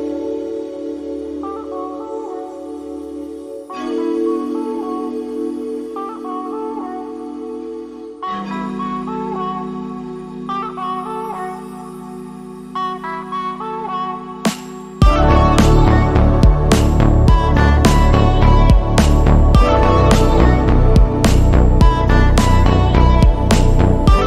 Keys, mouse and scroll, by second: 1.2-3.5 middle drag, 6.9 super+2, 7.4 click, 7.9 click, 8.7-9.7 middle drag, 10.0 click, 11.6 click, 12.3 shift+middle click, 13.5 click, 14.1 click, 14.6 click, 15.1 shift+middle click, 15.9 Escape, 16.4 click, 17.7 click, 18.1 5, 18.6 click, 19.2 click, 19.7 click, 20.6 click, 22.0 click, 22.5 5, 22.9 click, 23.4 click.